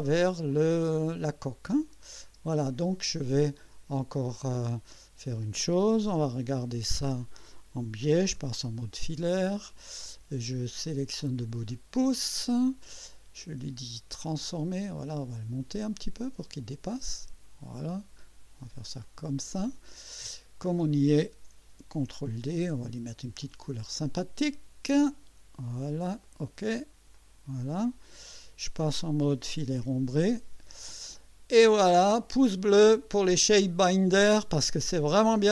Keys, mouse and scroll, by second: 1.8 click, 2.3 space, 3.4 click, 4.9-5.8 drag, 6.3 1, 10.9 click, 13.4 right click, 14.4 click, 15.8-17.7 drag, 19.0 click, 20.0-20.8 scroll down 3, 22.4 ctrl+d, 23.4 click, 25.1 click, 26.2 click, 27.2 click, 27.9 click, 29.0 click, 30.3 click, 31.2-33.9 drag, 34.6 scroll up 1, 35.4 click.